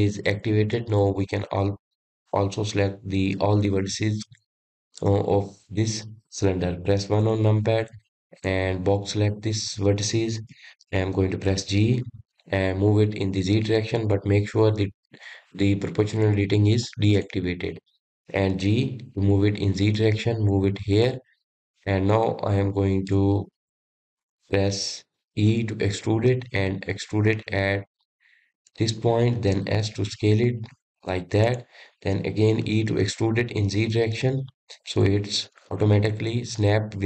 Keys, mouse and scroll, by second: 4.8-7.9 middle drag, 8.3 KP_1, 9.5 click, 12.6 g, 18.3 click, 19.6 g, 23.4-24.5 shift+middle drag, 24.5-26.6 scroll up 3, 26.6 e, 30.7 s, 33.7 e.